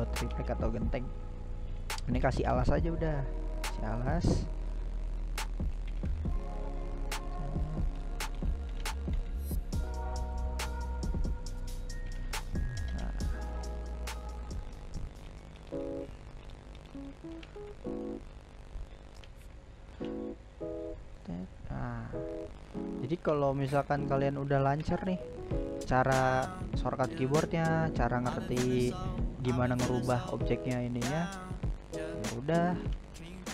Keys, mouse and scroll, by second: 0.9-2.1 middle drag, 2.1 s, 4.3 shift+middle click, 4.9 g, 6.8-8.3 middle drag, 8.3 s, 11.5-13.6 shift+middle drag, 13.6 g, 15.4 g, 17.7-18.3 middle drag, 18.3 right click, 18.6-18.9 scroll up 1, 18.9-19.4 middle drag, 19.4 g, 21.0 s, 21.8-24.7 middle drag, 24.7-25.0 scroll up 2, 25.0-29.1 middle drag, 29.1 g, 30.6-32.3 middle drag, 32.3 scroll down 1, 32.5 scroll up 1, 32.7 middle click, 33.1 g.